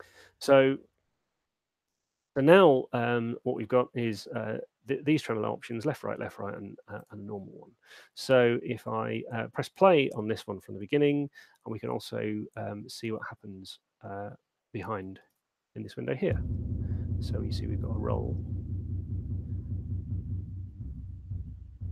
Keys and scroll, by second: 15.3 alt+shift+space.